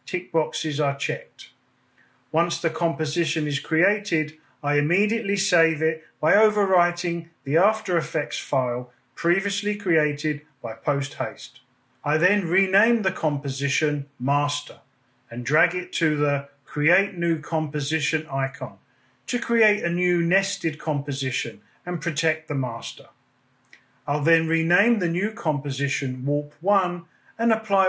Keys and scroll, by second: 3.6 super+s, 14.3 shift+m, 14.5 s, 15.6 Return, 24.5-25.7 typing, 26.3 Return.